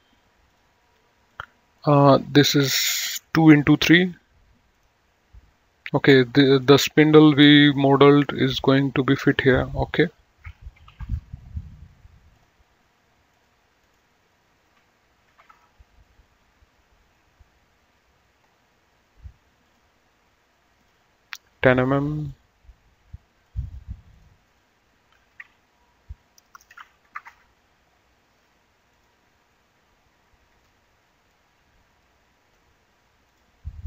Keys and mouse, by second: 0.8 click, 5.0 click, 6.8 click, 9.2 right click, 9.6 click, 11.0 KP_2, 11.3 Return, 12.6 click, 15.6 KP_3, 15.8 Return, 15.8 KP_Enter, 19.9 click, 21.1 click, 22.4 click, 23.5 click, 25.9 KP_1, 26.5 BackSpace, 27.3 KP_0, 27.5 Return, 29.2 click, 33.5 click.